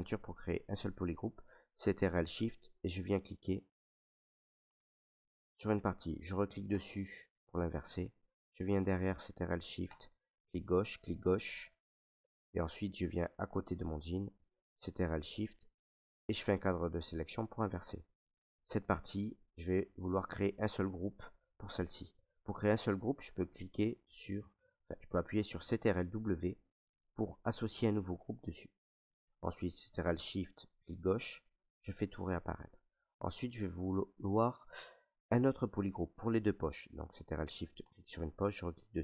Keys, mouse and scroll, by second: 2.7 click, 3.9 click, 5.2 click, 6.8 click, 8.7 right click, 10.0 click, 10.8 click, 12.9 ctrl+right click, 13.7 right click, 15.5 right click, 17.8 right click, 18.4 alt+right click, 19.5 right click, 21.3 right click, 22.4 right click, 25.9 ctrl+w, 27.2 click, 30.6 click, 31.7 click, 32.3 alt+right click, 33.0 ctrl+right click, 33.5 alt+right click, 34.4 right click, 35.3 right click, 36.0 click, 37.9 click.